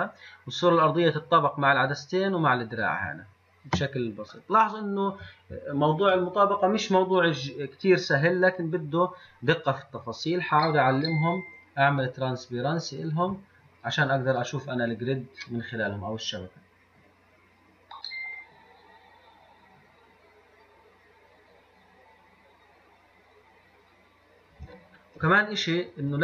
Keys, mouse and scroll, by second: 0.5-4.6 middle drag, 4.7-10.0 shift+middle drag, 10.0 click, 11.1 click, 12.2 click, 13.2 click.